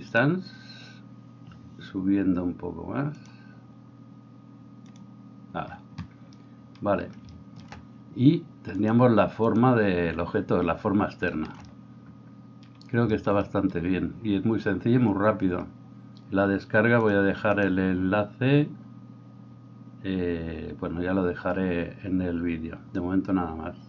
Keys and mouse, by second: 5.4-9.6 drag, 10.0-11.6 drag, 11.6-23.8 right drag.